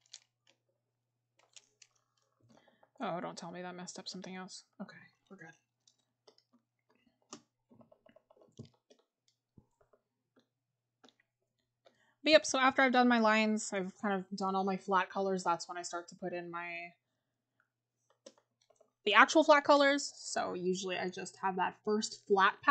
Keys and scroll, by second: 2.6-3.4 scroll down 1, 4.8 scroll up 1, 7.8 scroll up 1.